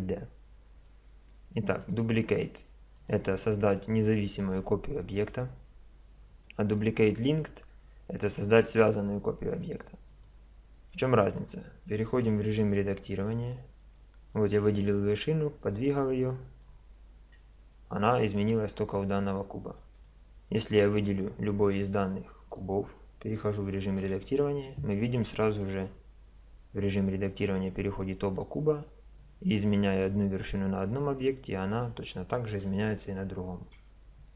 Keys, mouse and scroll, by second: 1.8-3.7 drag, 8.6-10.5 drag, 11.4 right click, 12.6 Tab, 13.0 click, 13.2-16.2 drag, 17.6 Tab, 19.3-20.0 middle drag, 20.0 drag, 24.0 Tab, 24.4-27.2 middle drag, 28.3 right click, 29.2-30.9 drag, 31.0 middle click, 33.8 Tab.